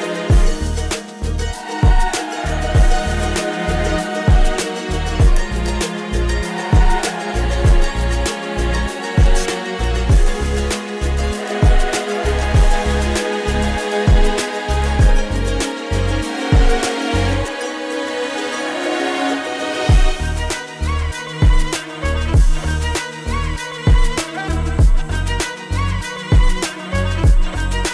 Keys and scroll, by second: 8.1 space, 9.8 space, 24.7 ctrl+z.